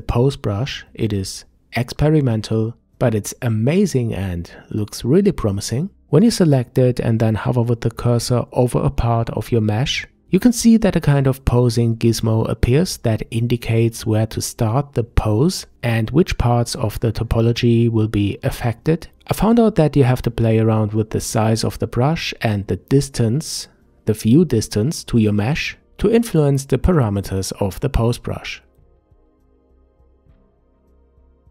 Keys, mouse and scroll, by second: 3.0 click, 3.7-6.3 middle drag, 6.3-7.4 scroll down 1, 7.4 f, 12.3-17.9 drag, 19.8 click, 20.7 f, 21.3-22.9 drag, 23.3 f, 24.8-25.8 drag, 25.9-26.8 middle drag, 26.8-29.5 drag, 29.5 f, 30.0 click, 30.5 f, 31.3 click.